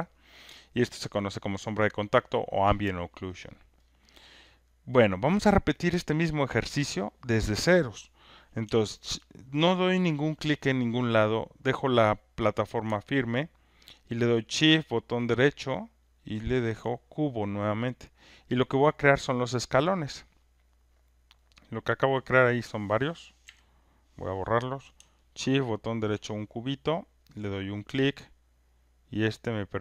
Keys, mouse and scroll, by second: 0.2 alt+middle click, 0.9 alt+click, 3.2 alt+right click, 3.6 alt+middle click, 5.3 click, 6.0 click, 16.2-18.3 shift+right drag, 18.4 click, 21.0 click, 21.2 click, 21.3 click, 21.9 click, 23.4 Delete, 23.4 click, 26.1 shift+right click.